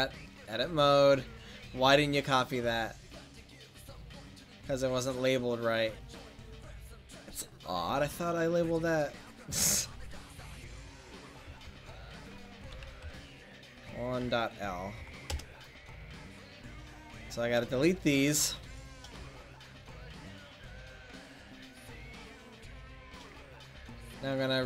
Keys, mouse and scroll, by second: 0.6 middle click, 11.6 BackSpace, 16.4 middle click, 17.2-19.1 right drag, 19.1 x, 20.4 middle click, 21.3 click.